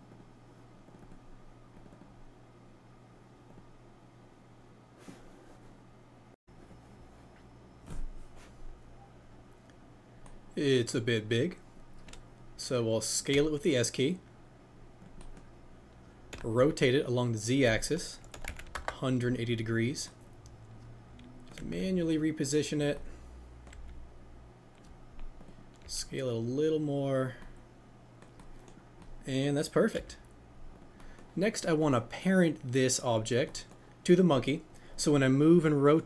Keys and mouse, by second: 15.0 click, 15.1 middle click, 20.0-21.5 middle drag, 21.5 g, 22.7-25.8 drag, 25.8 s, 28.1-30.7 middle drag, 30.7-33.2 drag, 34.2 click.